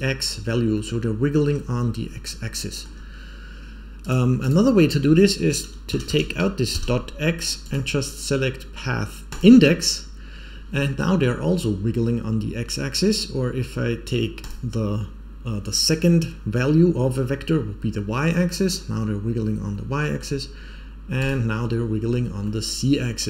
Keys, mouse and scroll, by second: 0.7-1.4 middle drag, 2.2-2.8 middle drag, 3.9-6.8 drag, 6.0 BackSpace, 7.6-9.3 drag, 14.3 click, 18.3-20.1 middle drag, 21.1 click, 22.4-23.2 middle drag.